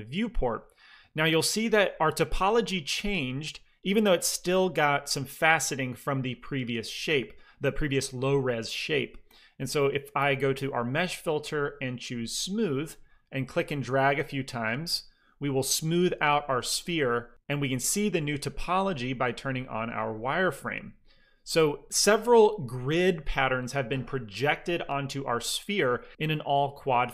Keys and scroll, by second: 1.6 f.